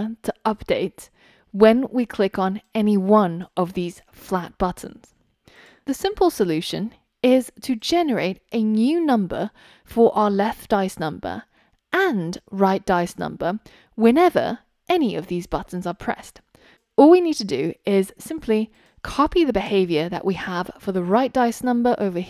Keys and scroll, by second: 18.3 super+c, 19.8 super+v.